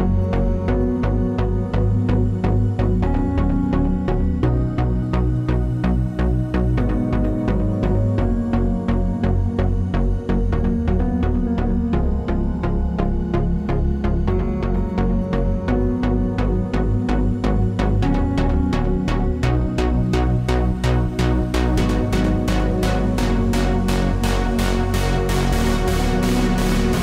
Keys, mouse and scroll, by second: 0.7 s, 1.4 click, 1.9 click, 2.7 middle click, 3.0 scroll down 4, 3.4 click, 4.3 shift+a, 5.8 click, 8.3 click, 9.3 click, 10.3 click, 11.4 s, 12.8 click, 13.8 scroll up 2, 14.3 click, 17.1 s, 17.9 middle click, 17.9-18.7 scroll up 4, 17.9 s, 18.7 shift+middle click, 19.3 click, 19.8 scroll down 5, 20.1 middle click, 20.5 click, 21.6 click, 22.9 shift+d, 23.5 click, 25.7 click, 26.0 shift+click, 26.7 shift+d.